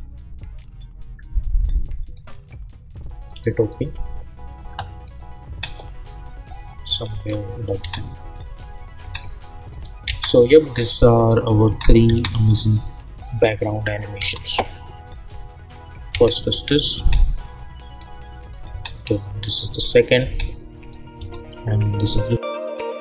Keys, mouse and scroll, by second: 5.4 space, 7.2 click, 7.8 space, 9.5 click, 10.1 space, 14.1 space, 15.1 click, 16.1 space, 17.8 click, 18.7 space, 20.7 click, 21.2 space.